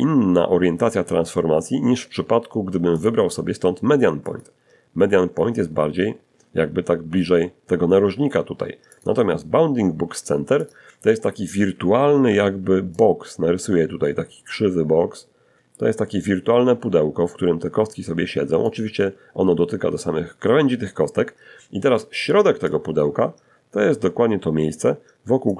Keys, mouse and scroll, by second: 1.2 click, 2.5 click, 7.2 click, 8.8 click, 10.5 d, 10.7 d, 11.2-17.0 drag, 11.2 d, 20.6 d, 20.9-23.1 drag, 20.9 d, 23.7-25.5 drag.